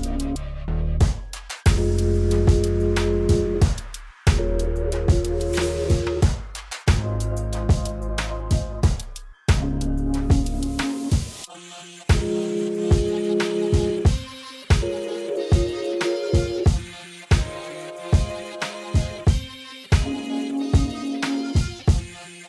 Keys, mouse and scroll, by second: 5.5 shift+a, 10.7 click, 12.5-14.8 drag, 17.2 click, 20.1 shift+s, 21.3 shift+a.